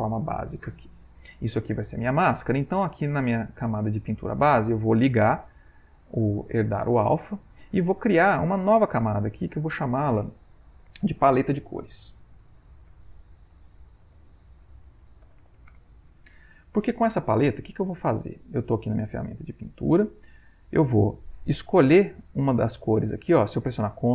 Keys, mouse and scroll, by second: 2.8 click, 5.7 click, 8.6 click, 9.4 click, 11.1-16.0 typing.